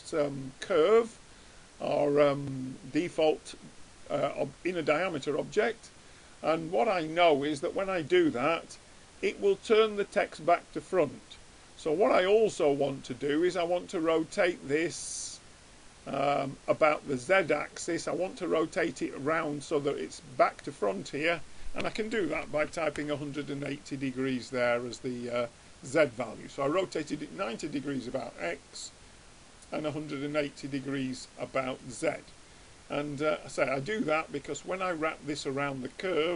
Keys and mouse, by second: 1.2-3.3 middle drag, 11.2-13.0 middle drag, 13.2-15.0 drag, 16.0-19.2 drag, 21.0-22.8 drag, 25.5-27.4 drag, 30.2-32.0 drag, 32.0 middle click, 33.0 middle click.